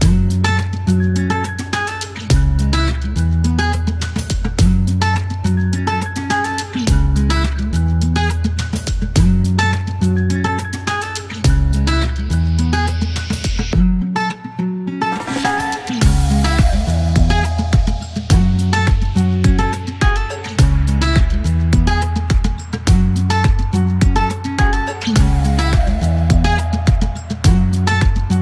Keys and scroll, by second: 1.7 e, 3.3 KP_0, 6.3 alt+e, 6.6 KP_9, 10.9 alt+m, 11.0 alt+z, 12.4 KP_9, 15.3 typing, 17.1 e, 19.6 typing, 22.7 alt+q, 23.7 alt+q, 24.9 KP_9, 27.8 alt+m, 27.9 typing.